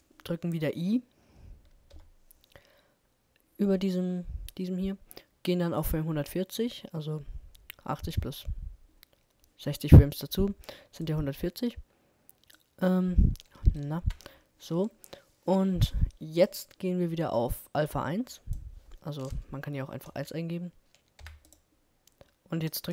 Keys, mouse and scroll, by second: 1.9 i, 5.8-7.6 drag, 7.9-9.9 drag, 11.2-14.2 drag, 14.0 Right, 16.4-18.4 drag.